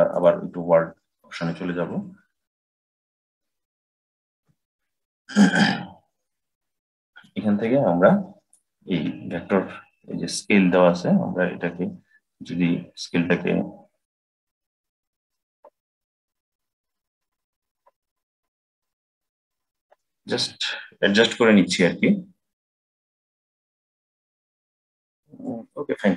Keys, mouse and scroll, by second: 2.4-4.2 drag, 4.2 n, 5.4-7.1 scroll up 3, 7.1-10.1 middle drag, 10.5-13.6 drag, 15.7 click, 19.1-20.3 drag.